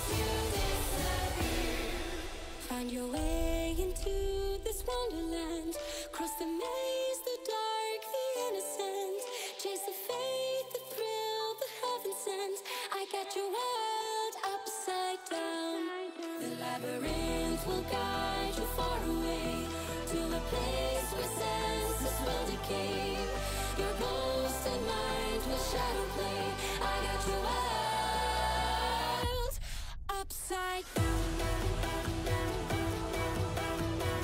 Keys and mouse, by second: 0.5 ctrl+r, 2.9 ctrl+r, 5.6 Tab, 6.1-6.6 right drag, 6.9 click, 7.1-8.3 middle drag, 8.8 Tab, 9.6 middle click, 10.2 shift+middle click, 10.5 middle click, 10.9 a, 11.3 middle click, 11.9 middle click, 12.2 2, 13.2 click, 13.7 ctrl+x, 14.7 ctrl+z, 15.7 a, 16.0 m, 17.3 click, 19.0 shift+n, 20.1 2, 21.0 click, 22.1 click, 22.9 click, 23.2 click, 23.4 click, 24.2 middle click, 24.5 shift+middle click, 25.6 ctrl+x, 27.1 middle click, 27.8 click, 29.8 click, 31.1 Tab, 31.4 middle click, 32.3 Tab, 32.7 shift+middle click, 33.2 middle click, 33.6 2, 34.0 middle click.